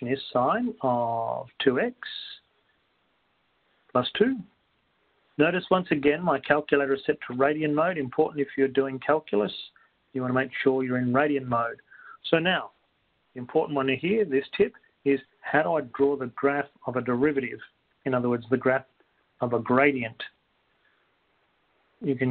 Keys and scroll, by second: 1.8 2, 2.4 x, 3.4 ), 5.4 2, 9.8 Down.